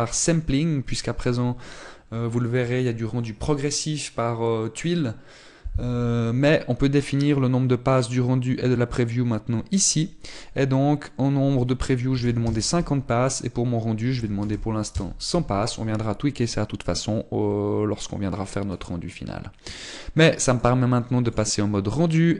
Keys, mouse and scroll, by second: 13.3 click, 15.8 click, 20.0-20.9 scroll up 10, 21.4 click.